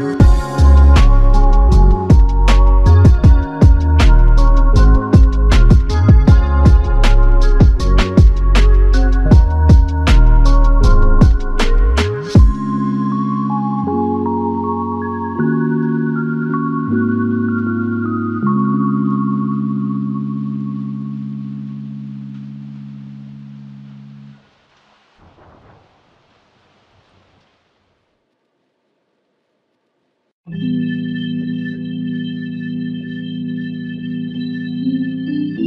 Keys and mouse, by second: 5.6 double click, 8.3 ctrl+click, 14.4 alt+click, 16.9 double click, 24.7-26.0 typing, 27.0 double click, 27.7-29.0 typing, 29.5 double click.